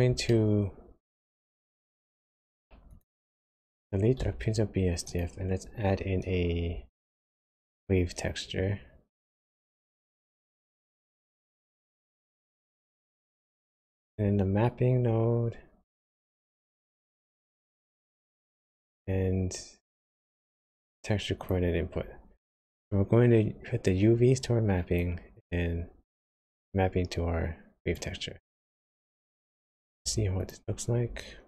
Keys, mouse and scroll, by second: 0.3 shift+middle click, 2.9 click, 4.3 x, 5.1 click, 6.9 shift+a, 13.9 shift+a, 18.6 shift+a, 23.8 click, 26.4 click, 29.0 click, 30.5 ctrl+shift+click.